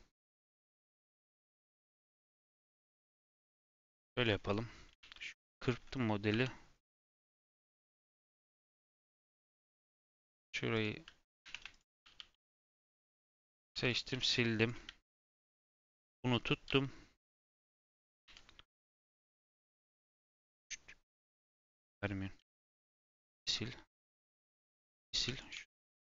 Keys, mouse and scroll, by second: 0.1 Tab, 1.0 middle click, 1.6 scroll down 1, 1.8-2.9 middle drag, 2.9-3.5 scroll up 1, 3.5 KP_7, 3.8 ., 4.2 scroll down 6, 4.7 scroll up 1, 5.0 ctrl+r, 6.3 3, 6.9 click, 7.3 scroll down 1, 7.5 v, 8.4 g, 9.6 2, 9.7 click, 10.1 ctrl+b, 11.7 alt+click, 12.0 g, 13.7 3, 13.8 click, 14.1 x, 15.1 click, 16.0 middle click, 16.6 g, 17.7 middle click, 18.2 1, 19.0 click, 20.4 click, 22.3 x, 24.1 click, 24.3 x, 25.2 3, 25.3 click, 25.5 g.